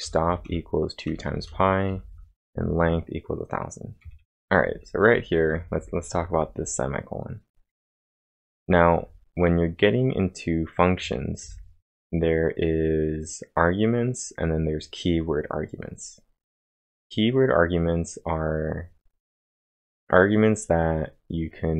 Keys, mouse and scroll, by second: 0.0-2.5 typing, 4.2 typing, 5.6-6.3 typing, 8.7-11.0 typing.